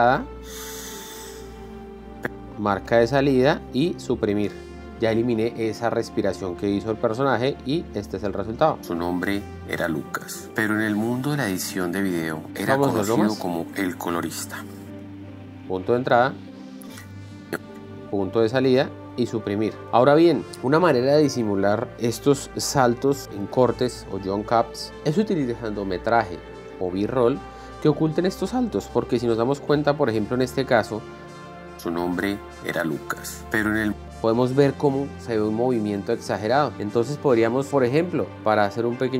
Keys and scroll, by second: 2.8 k, 3.6 o, 5.0 Delete, 9.3 shift+l, 12.5 k, 13.0 l, 15.6 i, 16.3 l, 17.6 k, 18.0 Right, 18.3 o, 19.8 Down, 20.4 Down, 31.9 l, 34.4 k.